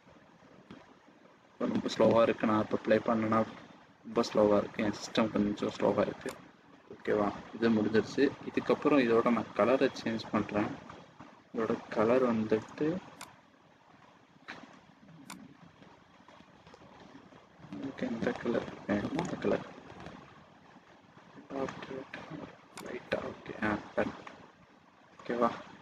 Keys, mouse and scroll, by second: 6.5 click, 10.4-11.0 scroll up 5, 11.0 scroll down 1, 11.2-11.8 scroll up 2, 12.4-12.8 scroll up 4, 13.1 click, 25.2 middle click.